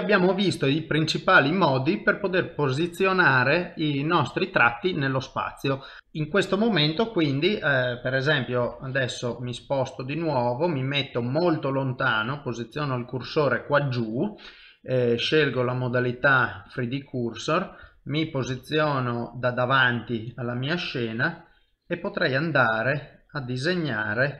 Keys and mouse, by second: 0.0 shift+middle click, 2.1 click, 8.6 KP_7, 9.4 ctrl+middle click, 10.4 shift+middle click, 12.4 shift+right click, 15.2 click, 17.8 KP_3, 18.5 KP_1, 20.8 click.